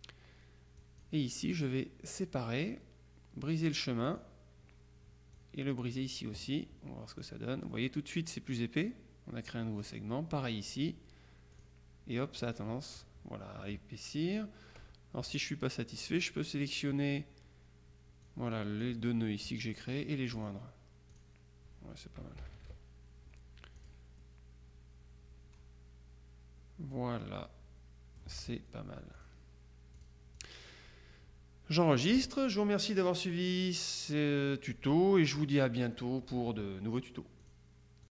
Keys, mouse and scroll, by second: 0.9 click, 4.1 click, 5.4-6.5 drag, 7.4 click, 9.6 click, 10.5 click, 11.6 click, 12.5 click, 15.3-16.6 drag, 18.3-19.4 drag, 21.2 click, 22.5 KP_Subtract, 23.9 click, 29.2 click, 30.0-31.0 drag, 31.8-32.8 drag, 37.5 click.